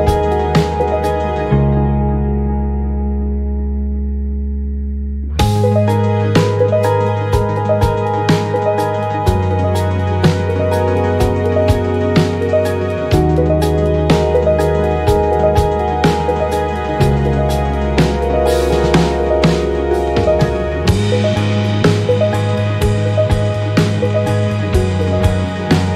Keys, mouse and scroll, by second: 0.7 click, 1.4 click, 2.1-2.7 ctrl+scroll down 4, 3.5 space, 6.1 click, 6.7 space, 8.0 click, 9.1 click, 10.5 ctrl+d, 12.0 ctrl+d, 12.8 click, 16.4-18.5 drag, 18.8-20.6 ctrl+drag, 21.2 shift+click, 22.2 ctrl+KP_Subtract, 24.1 ctrl+shift+9.